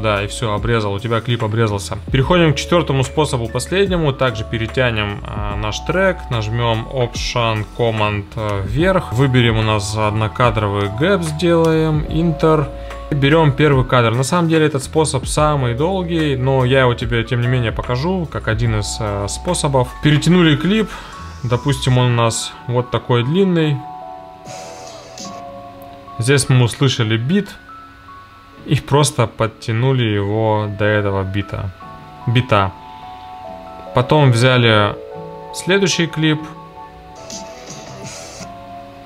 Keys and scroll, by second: 8.5 alt+super+Up, 10.8 1, 11.6 Return.